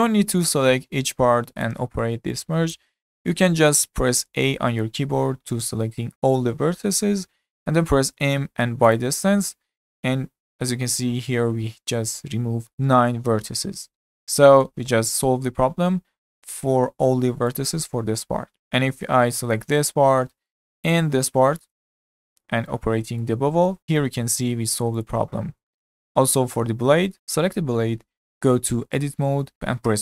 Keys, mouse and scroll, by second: 0.3-1.1 middle drag, 1.1 click, 2.3 click, 3.4 middle click, 4.4 a, 8.1 m, 14.2 middle click, 14.7 Tab, 15.6 z, 17.5-18.6 middle drag, 18.6 click, 19.0-20.7 middle drag, 20.7 scroll down 2, 21.0-22.2 middle drag, 22.2 shift+click, 22.6 scroll down 1, 22.7-23.7 middle drag, 23.7 ctrl+b, 25.3-25.8 scroll down 4, 25.8-28.9 shift+middle drag, 28.9 Tab, 29.5-30.0 middle drag.